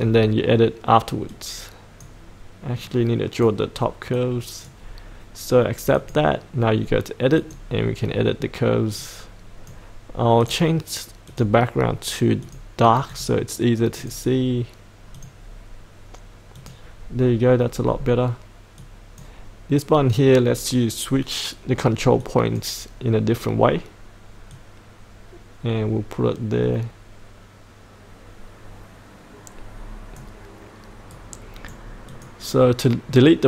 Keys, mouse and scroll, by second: 0.0-1.3 scroll down 1, 1.3-2.8 drag, 17.8-18.8 scroll down 1, 18.8-30.1 drag, 31.1 right click, 32.1-33.2 drag.